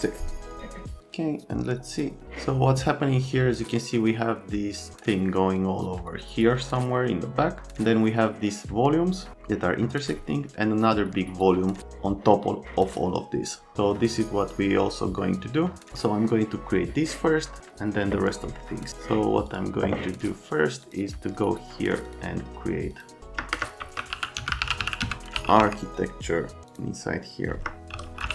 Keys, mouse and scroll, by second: 15.5 middle click, 19.4 middle click, 20.8 middle click, 23.6-26.1 typing, 27.7-28.3 typing.